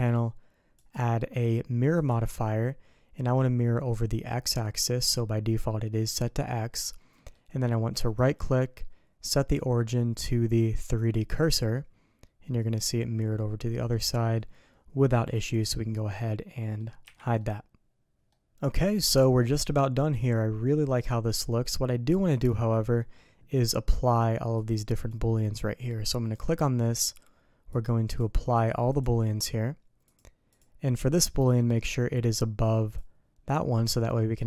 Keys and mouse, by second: 7.1 middle click, 8.2-11.0 drag, 11.7-15.0 middle drag, 15.4-16.8 middle drag, 17.0 h, 17.4-18.1 middle drag, 18.3-21.7 middle drag, 22.3-25.1 drag, 26.7 middle click, 27.7 click, 28.5 click, 30.0 click, 32.3-33.0 drag.